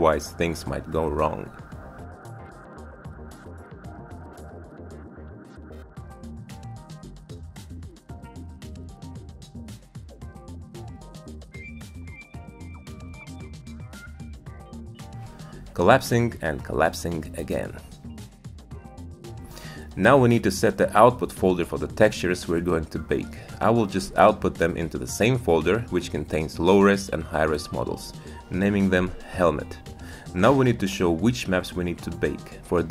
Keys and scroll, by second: 24.7-26.3 typing, 26.4 Return.